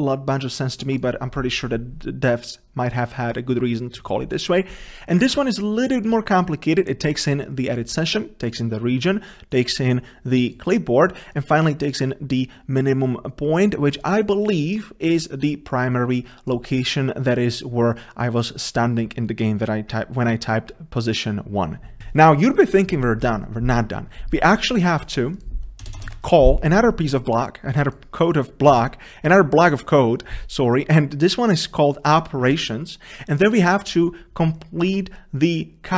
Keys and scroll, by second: 26.2 ctrl+v, 28.8 ctrl+v, 28.8 ctrl+space.